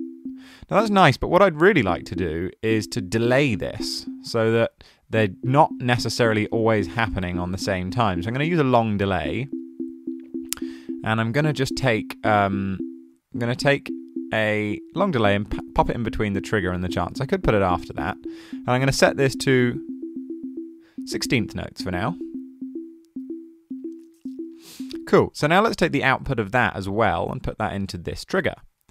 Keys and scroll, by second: 6.1-7.4 typing.